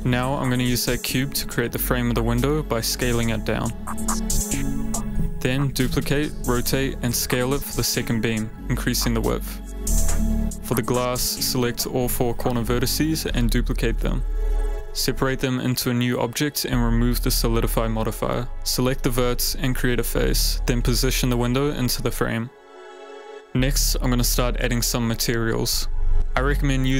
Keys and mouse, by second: 0.7 click, 1.1 g, 1.9 click, 2.3 s, 3.9 s, 3.9 y, 5.7-7.7 typing, 7.7 Return, 8.9 ctrl+z, 8.9 s, 8.9 a, 8.9 x, 10.3 Tab, 10.4 a, 10.5 a, 10.7 click, 12.0 Tab, 12.2 click, 12.6 click, 13.2 shift+click, 13.8 shift+click, 14.6 shift+d, 15.4 p, 16.6 click, 16.7 middle click, 16.8 Tab, 17.0 click, 19.3 Tab, 19.3 a, 19.5 f, 19.8 Tab, 20.5 Tab, 21.6 g, 22.0 y, 22.3 x, 24.1 ctrl+s, 25.2 shift+h, 26.5 alt+h.